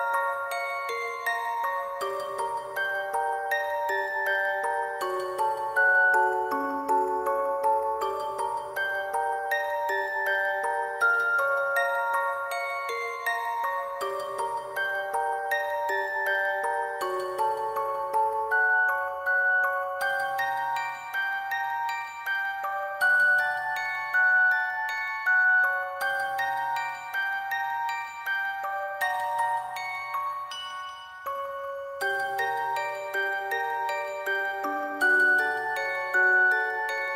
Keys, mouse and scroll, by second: 0.0 alt+click, 0.1 alt+click, 0.5 alt+click, 1.4 alt+click, 2.4 alt+click, 3.0 alt+click, 3.1 alt+click, 3.8 alt+click, 4.4 alt+click, 5.0 alt+click, 5.5 alt+click, 6.1 alt+click, 6.8 alt+click, 7.5 alt+click, 8.0 alt+click, 8.4 alt+click, 9.9 alt+click, 10.1 alt+click, 10.2 alt+click, 10.6 ctrl+s, 10.8 double click, 14.7 alt+click, 15.0 double click, 15.3 alt+click, 16.0 double click, 17.8 double click, 18.2 ctrl+click, 18.4 alt+click, 19.8 double click, 20.4 double click, 21.7 ctrl+click, 21.9 alt+click, 23.0 alt+click, 23.7 double click, 24.2 double click, 24.4 ctrl+click, 24.7 double click, 25.5 ctrl+click, 25.7 alt+click, 26.1 double click, 26.2 ctrl+click, 27.1 double click, 27.2 ctrl+click, 27.8 ctrl+click, 28.7 double click, 30.0 double click, 31.0 double click, 31.1 alt+click, 31.2 ctrl+click, 31.5 alt+click, 32.0 double click, 32.8 double click, 33.2 ctrl+click, 33.9 double click, 34.1 ctrl+click, 34.5 double click, 35.0 ctrl+click, 35.2 alt+click, 36.1 double click, 36.6 double click.